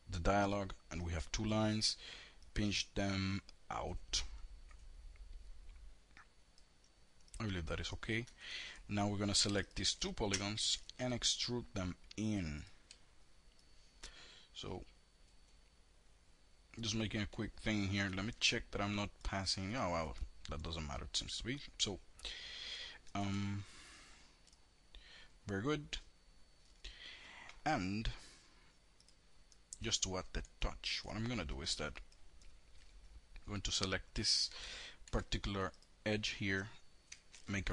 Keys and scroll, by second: 8.8 4, 16.9 F3, 22.1 F3, 34.3 2, 36.2 alt+r.